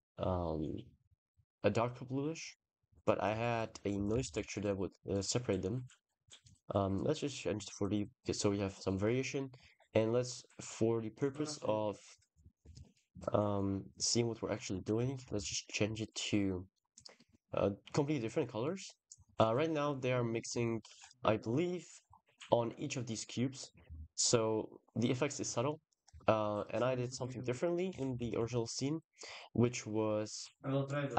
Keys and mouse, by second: 6.2 click, 6.6-7.2 drag, 7.5 click, 8.6 middle click, 9.5 click, 9.9 click, 12.7-13.9 shift+drag, 15.2 ctrl+s, 16.6 click, 18.5 drag, 20.5-21.3 shift+middle drag, 21.9-22.4 middle drag, 22.4 click, 22.5 middle click, 22.5 click, 28.0 ctrl+s, 28.3 shift+click, 30.7 drag.